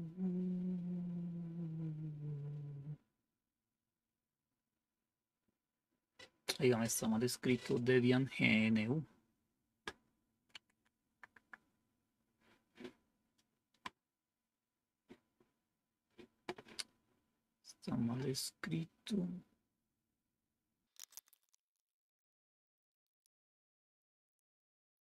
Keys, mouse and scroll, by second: 21.0 click, 21.1-23.2 typing, 22.4-22.9 Page_Down, 22.8 Page_Down, 22.9 Down, 22.9 Right, 23.1 Right, 23.2 Delete, 23.4 Right, 23.4-24.9 Down, 24.0 Up, 24.1 Down, 24.4 Left, 24.4 Delete, 24.4 Right, 24.4 space, 24.4 /, 24.5 Delete, 24.5 Down, 24.8 Down, 24.9 Up, 25.1 Left.